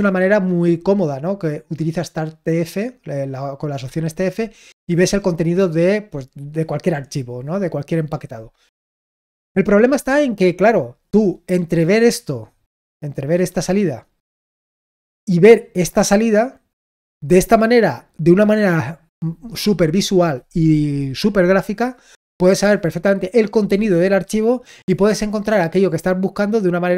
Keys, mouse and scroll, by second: 13.1-15.5 drag, 16.0-17.1 drag, 17.2 click.